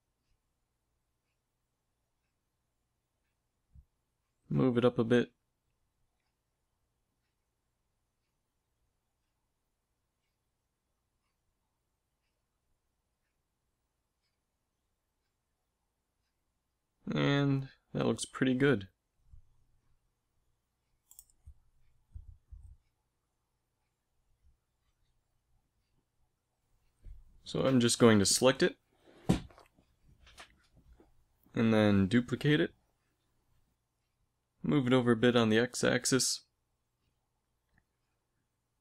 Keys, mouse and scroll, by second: 3.8 g, 10.7 s, 12.7 s, 16.0 g, 21.1 a, 24.7 ctrl+s, 27.5 z, 28.6 z, 31.5 shift+d, 33.5 g, 35.2 click.